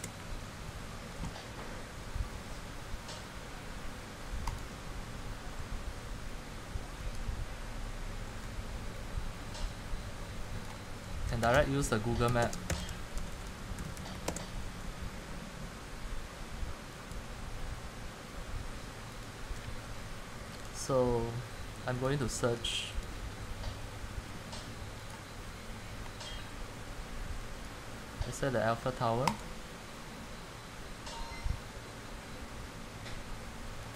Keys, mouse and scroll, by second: 0.0-0.1 typing, 4.7-7.4 drag, 7.9-11.2 drag, 11.2 typing, 12.3-13.5 typing, 14.4 Return, 17.3 click, 19.4 click, 22.2 click, 25.2 click, 27.7 click, 29.4 click.